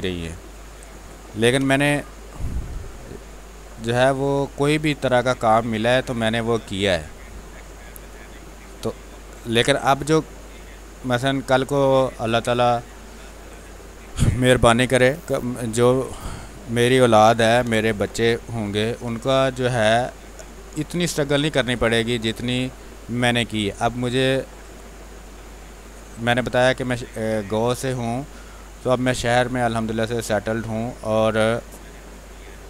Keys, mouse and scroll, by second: 0.8 click, 1.3 b, 1.7 click, 2.1 space, 2.8 click, 4.0-6.5 drag, 6.5-7.9 drag, 7.9-11.7 drag, 12.4 space, 12.8 alt+click, 13.5-15.7 drag, 17.4 b, 17.6 space, 17.8 click, 17.9 click, 18.1 space, 18.9 ctrl+click, 20.2-25.6 drag, 25.6 space, 25.9 click, 26.2 space, 27.0-32.6 drag.